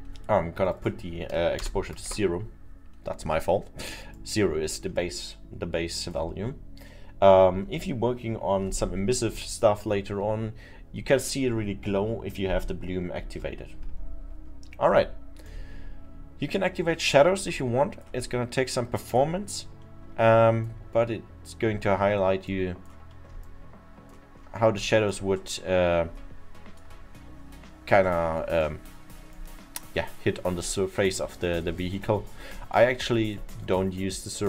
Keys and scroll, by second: 1.6 0, 2.1 Return.